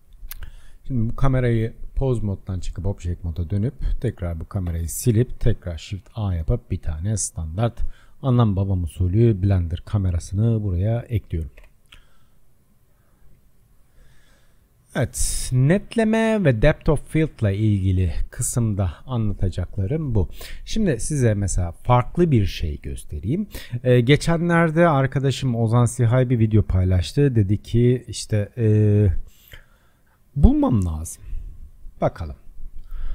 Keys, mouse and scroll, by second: 1.0 click, 2.2-3.6 drag, 4.1 click, 4.7 Delete, 5.9 shift+a, 10.5-11.6 drag, 11.6 KP_0, 12.2-13.2 scroll down 17, 13.2-13.6 scroll up 2, 13.6 shift+middle click, 14.3-14.7 scroll up 4, 14.8-15.3 scroll down 3, 15.3-16.3 shift+middle drag, 16.3-16.8 scroll up 2, 16.8-17.6 scroll down 1, 17.6-24.6 shift+middle drag.